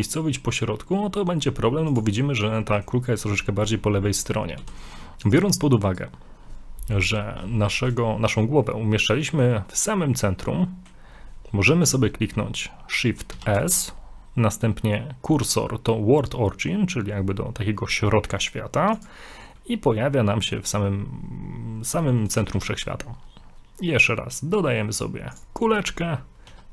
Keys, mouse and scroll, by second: 2.7 middle click, 4.1 middle click, 4.2 middle click, 4.3 scroll down 1, 4.6 x, 5.9 right click, 7.7 shift+middle click, 8.7 middle click, 10.5 middle click, 13.3 shift+s, 19.5 middle click, 25.7 scroll down 1, 26.5 s.